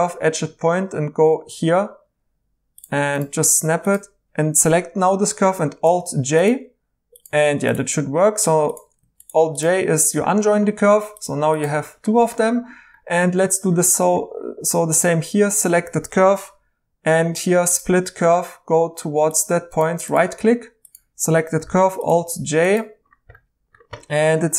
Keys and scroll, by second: 5.8 alt+j, 21.6 alt+j.